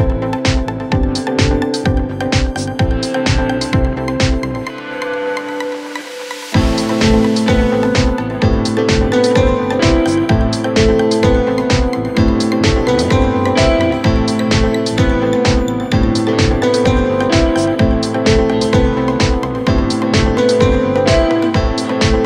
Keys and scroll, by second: 1.2 f, 9.7 d, 11.1 f, 12.7 d, 16.0 f, 18.2 Escape.